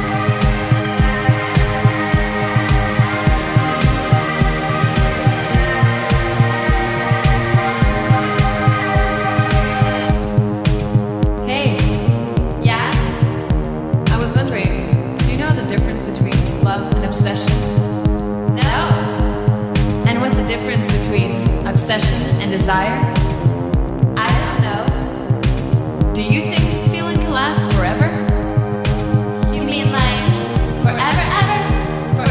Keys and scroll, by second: 3.7 ctrl+z, 5.9 space, 7.1 space, 7.6 space, 10.8 space, 15.0 ctrl+z, 16.0 ctrl+z, 16.5 ctrl+z, 18.2 ctrl+z, 19.5 space, 20.3 ctrl+z, 20.7 ctrl+z, 23.4 ctrl+z, 23.9 ctrl+z, 28.3 space, 29.8 space, 31.0 ctrl+z, 32.1 ctrl+z.